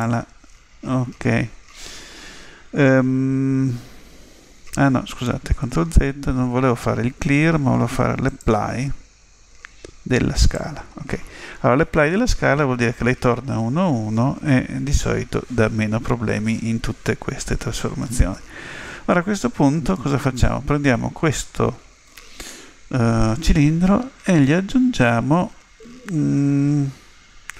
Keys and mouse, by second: 5.4 ctrl+z, 19.8 z.